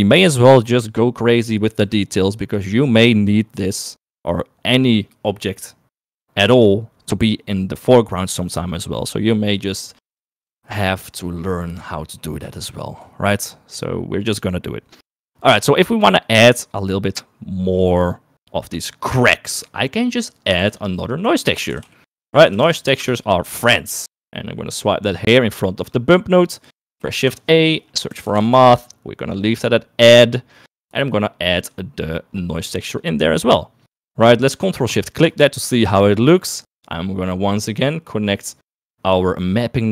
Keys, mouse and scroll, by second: 12.6 shift+middle click, 14.3 click, 19.4 click, 20.1 click, 20.6 shift+a, 26.9 shift+a, 32.0-33.1 drag, 34.4 middle click, 35.4 ctrl+shift+click, 37.5 middle click.